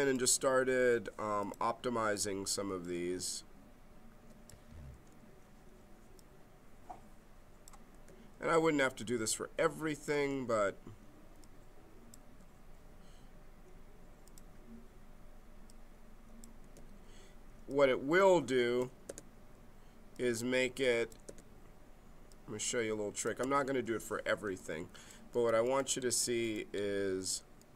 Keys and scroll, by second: 4.9 g, 9.0 g, 10.2 g, 16.6 g, 19.0 g, 21.3 g.